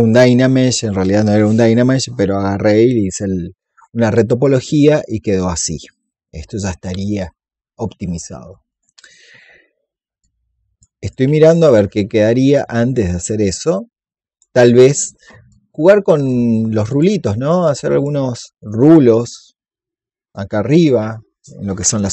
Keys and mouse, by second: 4.5-8.1 drag, 8.6-11.7 drag, 11.8 alt+click, 12.8 click, 16.8 alt+click, 17.4 click, 21.7-22.1 drag.